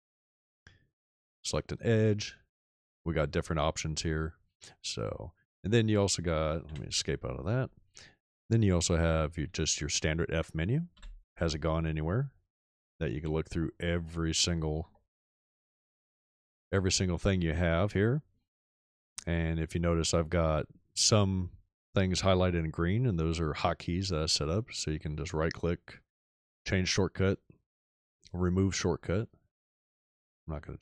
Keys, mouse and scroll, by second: 6.6 Escape, 11.1 f, 12.5-16.6 scroll down 3, 15.0 middle click, 15.6-16.6 middle drag, 16.6-19.3 scroll up 4, 18.3 middle click, 19.6-20.4 scroll up 2, 24.6 click.